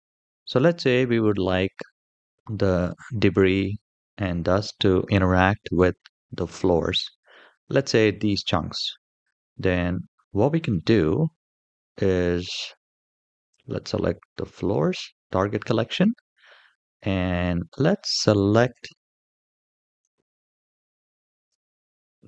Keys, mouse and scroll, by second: 1.1-1.5 scroll down 1, 9.6-10.2 scroll down 1, 10.2-12.6 scroll up 1, 14.2 click, 16.8-17.7 middle drag, 18.4 KP_7, 19.9-20.2 shift+middle drag, 20.4-21.2 scroll down 1, 21.2 c.